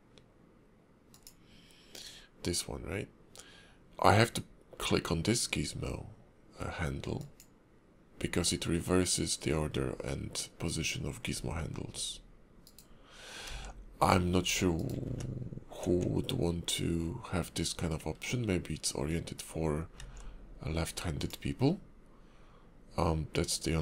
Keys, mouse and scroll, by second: 7.2 click, 12.6 right click, 13.5 alt+x, 15.0 ctrl+z, 20.0 alt+x, 21.1 click.